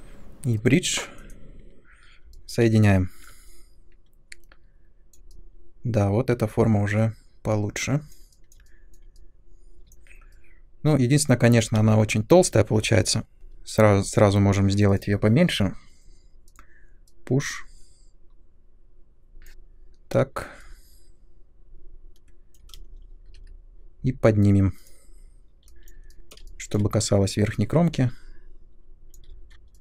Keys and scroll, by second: 11.7 space, 22.7 space, 23.2 w.